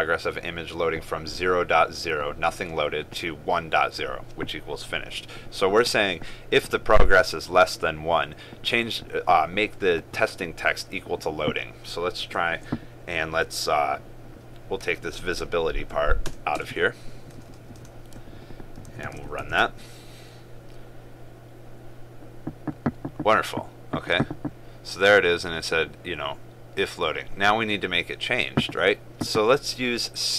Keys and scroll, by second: 19.1 ctrl+s.